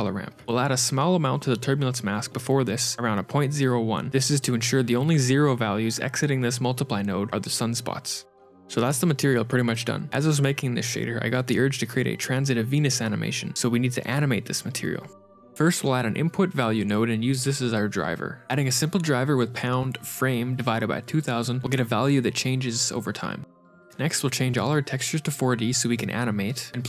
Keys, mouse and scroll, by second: 0.3 shift+a, 0.7 click, 3.2 click, 4.0 h, 4.5 click, 5.9 click, 8.3 shift+middle click, 8.3 ctrl+shift+click, 8.3 scroll down 3, 9.0-9.5 scroll up 2, 9.7 shift+middle click, 11.2 scroll down 1, 11.6 shift+middle click, 15.0 middle click, 15.3 shift+a, 19.1-19.8 scroll up 10, 19.5 middle click, 19.8 click, 22.1 KP_0, 22.3 KP_0, 23.1 scroll down 7, 23.6 middle click, 24.5 click, 26.0 click.